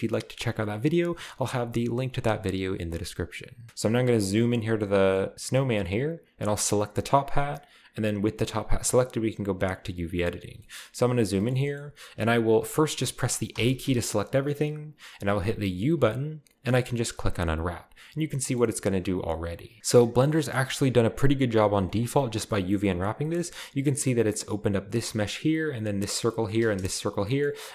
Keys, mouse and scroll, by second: 3.7 alt+h, 3.7-5.6 shift+scroll up 2, 4.4-5.6 shift+middle drag, 6.5-9.4 right drag, 9.6 click, 10.6 shift+middle drag, 10.8 shift+middle click, 10.8-11.3 shift+scroll up 2, 11.4 middle click, 11.6 shift+middle click, 11.8 shift+middle click, 11.8-12.6 shift+scroll up 2, 12.6-13.5 scroll up 1, 13.5 a, 13.8 a, 15.7 u, 17.3 click, 17.9-18.4 scroll down 1, 18.4-19.4 middle drag, 18.6-19.4 scroll up 1, 19.4-19.8 scroll up 1, 21.0 u, 21.8-23.2 drag, 23.3-24.4 scroll up 1, 26.0-26.8 scroll down 1, 26.8 scroll down 1, 26.8 a, 27.6-27.7 scroll up 1.